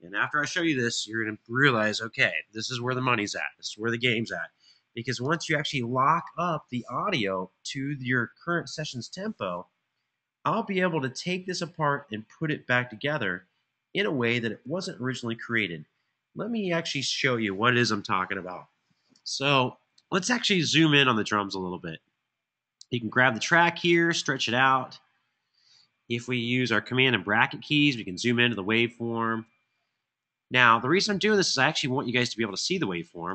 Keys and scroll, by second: 27.1 super+], 27.7 super+].